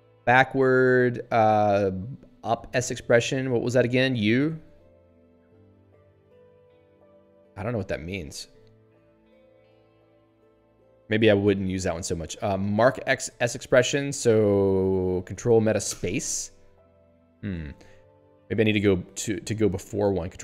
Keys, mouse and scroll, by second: 4.1 ctrl+alt+u, 4.9 ctrl+alt+a, 7.3 ctrl+alt+u, 8.0 ctrl+alt+a, 15.9 ctrl+alt+space, 17.5 ctrl+g, 19.3 ctrl+alt+b.